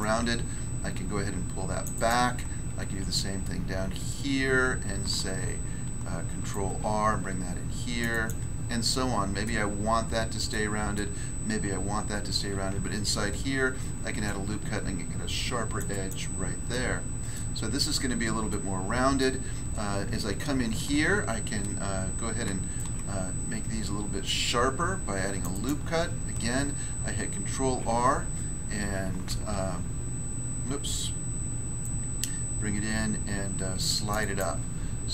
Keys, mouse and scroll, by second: 1.8 click, 3.3 ctrl+f, 5.2 ctrl+r, 8.9 middle click, 9.4 middle click, 10.5 middle click, 13.8 ctrl+r, 14.2 click, 15.7 click, 15.9 click, 16.5 scroll down 1, 16.7 middle click, 17.3 middle click, 18.5 middle click, 19.7 scroll up 1, 22.4 ctrl+r, 22.7 ctrl+click, 25.4 ctrl+click, 25.5 ctrl+click, 27.5 ctrl+r, 29.2 ctrl+r, 31.8 click, 34.1 click, 34.2 click, 34.7 scroll down 1.